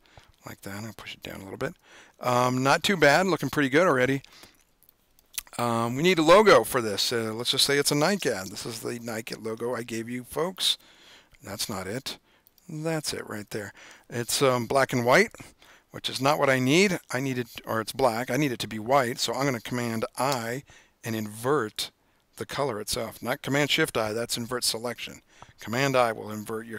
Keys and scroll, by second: 15.1 super+-, 15.6 super+-, 21.8 super+i.